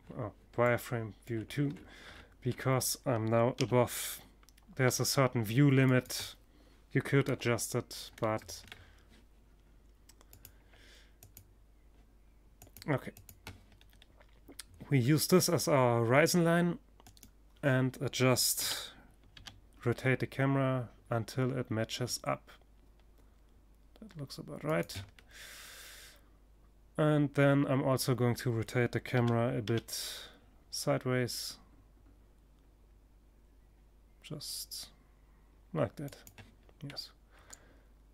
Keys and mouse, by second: 2.0 g, 3.2-4.3 middle drag, 4.5-5.5 drag, 5.7 KP_0, 6.5-8.8 middle drag, 11.0 middle click, 12.2 click, 12.6 click, 12.9 middle click, 15.5-17.3 right drag, 17.0 r, 23.2 click, 24.9 click, 27.6 r, 34.7-36.5 drag, 36.5-38.1 middle drag.